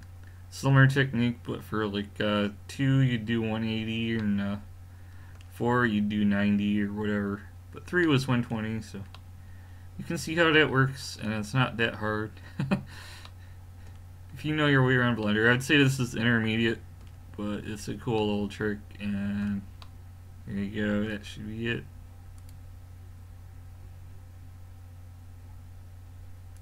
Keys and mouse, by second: 0.5-4.8 middle drag, 11.9-16.1 middle drag, 17.6-18.2 middle drag, 20.0-26.6 middle drag.